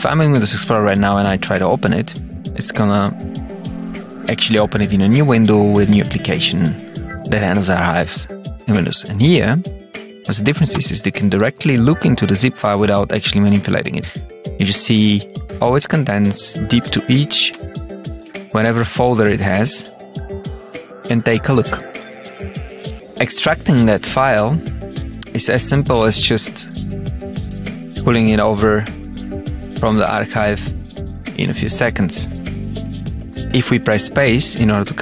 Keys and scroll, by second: 10.6 Return, 11.3 Down, 14.0 Return, 14.7 Down, 15.7 Return, 16.1 Down, 16.7 Page_Up, 16.8 Return, 17.2 Up, 17.5 Return, 17.9 Down, 18.1 Return, 19.0 Return, 19.6 Down, 19.7 Return, 20.8 Down, 21.8 Return, 22.0 Page_Up, 22.8 Page_Up, 22.9 Return, 23.0 Tab, 24.0 Return, 26.4 Tab, 27.4 Page_Up, 27.6 Return, 29.4 alt+F9, 30.5 Return, 32.4 Tab, 32.8 Down, 34.1 space.